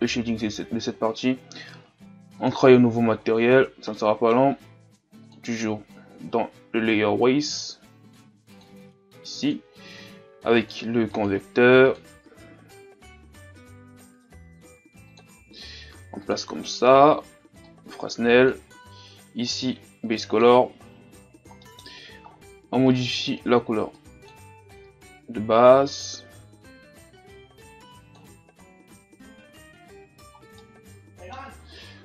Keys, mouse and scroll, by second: 2.5-20.7 drag, 21.2-21.6 scroll down 1, 21.6-23.9 middle drag, 23.9 click, 28.7-29.3 scroll up 1, 29.3-30.6 scroll up 3, 30.6-32.0 middle drag.